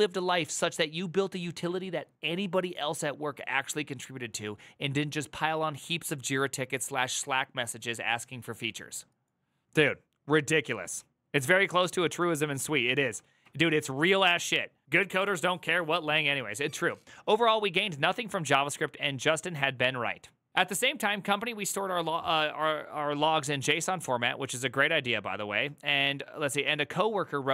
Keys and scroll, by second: 13.2 alt++.